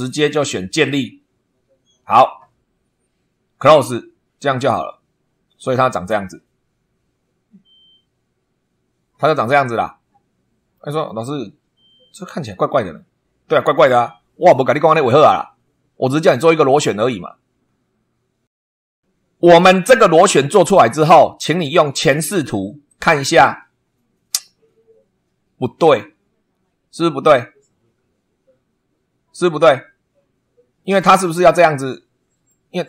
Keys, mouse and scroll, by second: 0.8-3.9 drag, 4.7 middle click, 9.0-10.9 middle drag, 22.9 click, 30.8-32.7 middle drag.